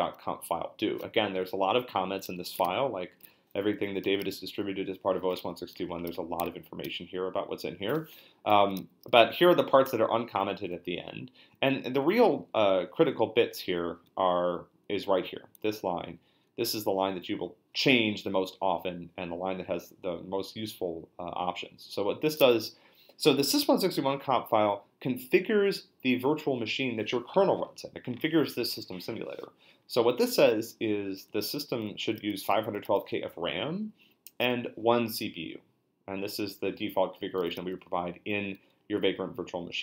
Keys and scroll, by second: 2.6 ctrl+f, 6.8 ctrl+f, 8.5 Down, 10.7 Down, 11.9 Up, 12.1 Up, 12.2 Up, 12.4 Up, 12.5 Down, 14.1 Up, 14.3 Up, 15.7 Right, 30.4 Right, 31.3 Left.